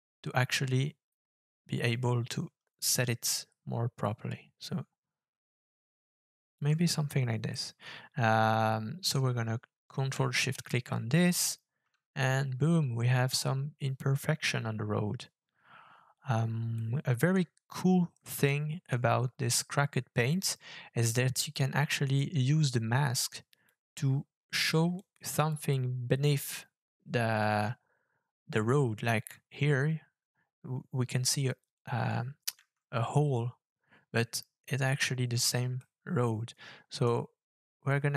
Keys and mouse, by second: 7.5-9.2 middle drag, 10.5 ctrl+shift+click, 16.8 middle click, 18.3 middle click, 21.4 click, 22.2-23.6 drag, 24.9 click, 35.8-37.1 middle drag, 38.0 middle click.